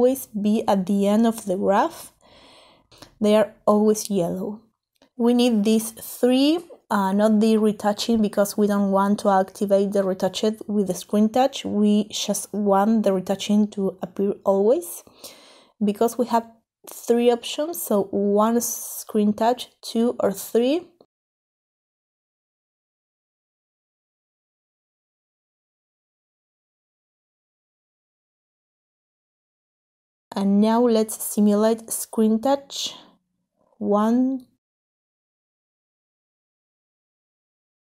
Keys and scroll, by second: 10.2 3, 13.3 1, 14.2 2, 17.6 3.